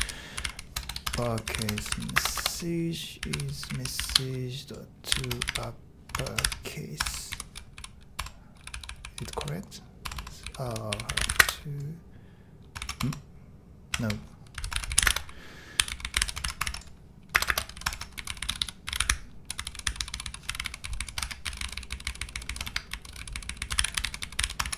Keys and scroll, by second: 0.0-11.8 typing, 7.1 Escape, 8.2 Tab, 12.8 Escape, 13.0 End, 14.0 shift+Home, 14.3-24.7 typing.